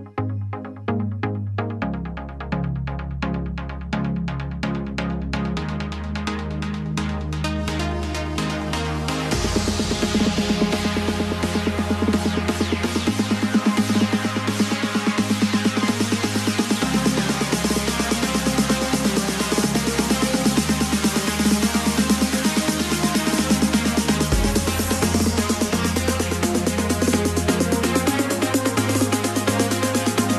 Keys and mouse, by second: 6.3 click, 7.9 click, 9.8 shift+click, 14.7 middle click, 21.5 click, 22.6 middle click, 24.5 KP_1, 28.5 e.